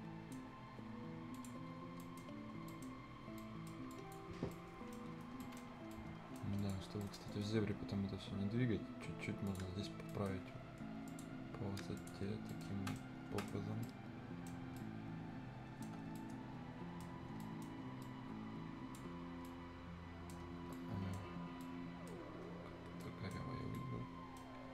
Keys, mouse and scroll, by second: 1.4 click, 1.7-2.0 scroll down 1, 2.0 scroll up 1, 2.0 right click, 2.3 scroll down 1, 2.7 right click, 2.9 scroll up 1, 3.4 right click, 3.9 click, 4.4 scroll down 1, 4.5 right click, 5.1 Delete, 5.1-5.4 scroll down 1, 5.4 right click, 5.7 scroll up 1, 5.9 right click, 6.6 click, 7.0 right click, 7.3-7.6 scroll up 1, 7.6 middle click, 9.5 click, 9.9 scroll down 1, 10.1 right click, 11.1 click, 12.3 scroll up 1, 12.5 right click, 12.7 scroll down 1, 12.9 right click, 13.4 scroll up 1, 13.4 right click, 13.7 scroll down 1, 13.8 middle click, 13.9 right click, 14.6 scroll up 1, 15.1-16.2 right drag, 16.2 right click, 17.1 scroll up 1, 17.4 right click, 18.0-19.3 drag, 19.3 scroll down 1, 19.5 right click, 20.7 right click, 21.3 scroll up 1, 21.6 right click, 22.2 scroll down 1, 22.9 scroll up 1, 23.0 right click, 23.8 right click.